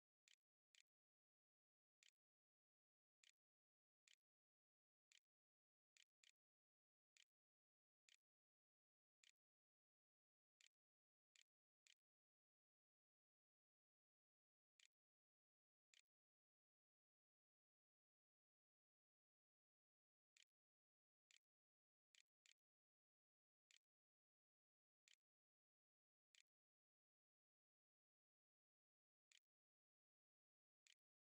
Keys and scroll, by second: 0.0-3.9 typing, 4.9 h, 5.8 o, 7.0-9.8 typing, 10.1 Delete, 10.4 End, 10.8 Insert, 10.8 Return, 11.2 Menu, 13.1 shift+Return, 13.4-17.1 typing, 15.7 Return, 19.6-23.6 typing, 24.9-27.2 typing, 29.1 End, 29.7 Delete, 29.9-31.2 typing, 30.1 Return, 31.1 Return.